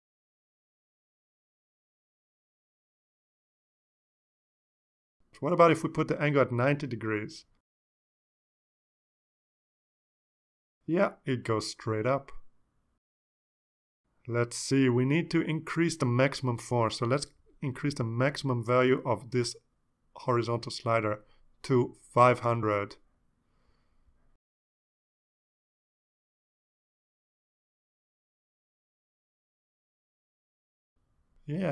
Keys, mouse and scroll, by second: 6.4-7.2 drag, 8.1-9.2 drag, 10.6 click, 15.1 click, 18.3 click, 18.7-19.2 scroll down 6, 19.7 click, 20.9 click, 21.3 click, 22.5 click, 23.5 5, 24.1 Return, 24.9 ctrl+s, 25.8 click, 28.0 click, 28.8-29.6 drag, 30.5 click.